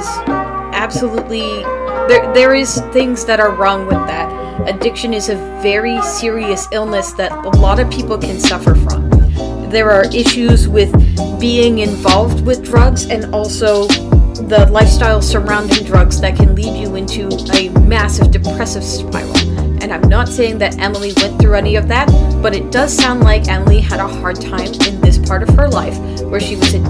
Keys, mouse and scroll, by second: 13.0 space, 15.0 space, 16.5 space, 18.0 space, 20.2 space.